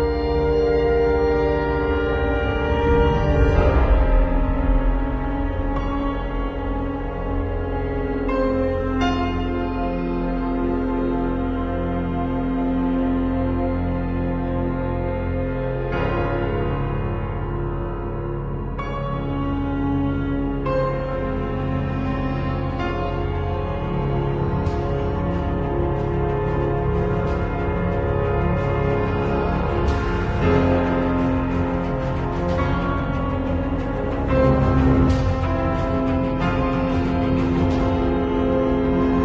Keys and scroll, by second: 10.3 b, 15.5 [, 17.6 [, 20.9 v, 21.2 z, 22.2 v, 25.3 super+g, 26.4-27.3 typing.